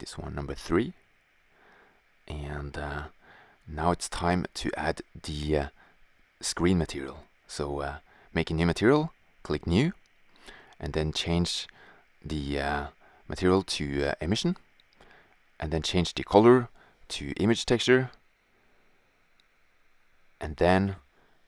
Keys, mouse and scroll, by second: 0.0 Return, 6.3-7.5 right drag, 8.0-9.2 drag, 9.3 click, 12.0-13.3 drag, 16.7-18.0 drag, 19.6 shift+z.